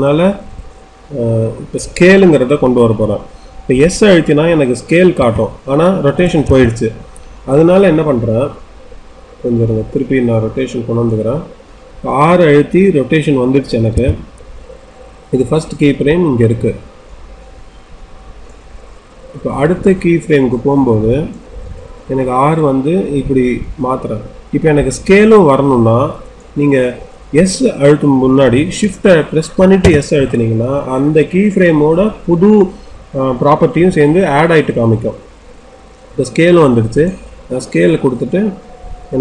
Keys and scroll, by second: 5.1 s, 13.9 r.